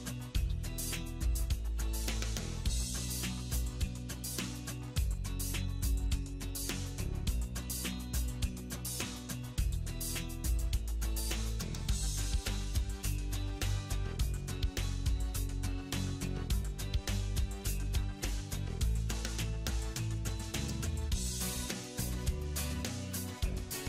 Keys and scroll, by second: 3.6 ctrl+z, 10.9 alt+w.